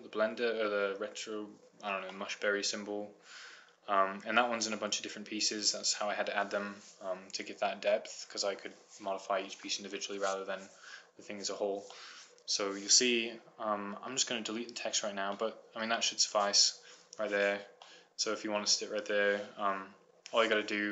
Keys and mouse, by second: 0.3 middle click, 2.1-5.4 middle drag, 5.7 middle click, 7.4-8.5 middle drag, 8.8-10.1 middle drag, 11.9 middle click.